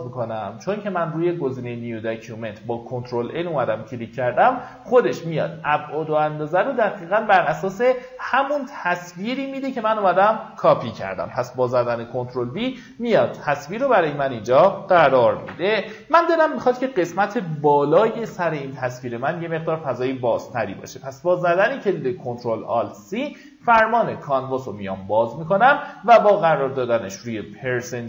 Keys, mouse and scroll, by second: 7.9 click, 10.0-10.5 alt+scroll down 1, 13.0 alt+scroll up 1, 21.2 click.